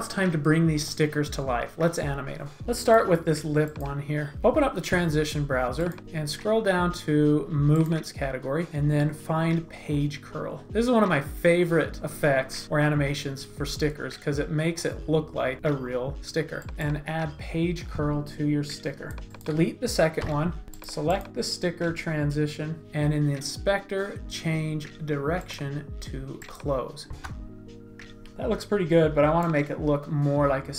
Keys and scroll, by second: 2.6 shift+z, 27.2 space.